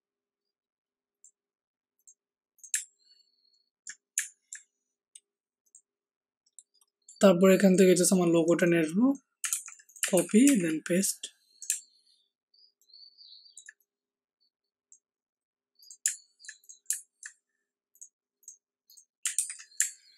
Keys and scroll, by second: 9.5 ctrl+c, 10.1 ctrl+v, 10.4 t, 19.3 ctrl+t.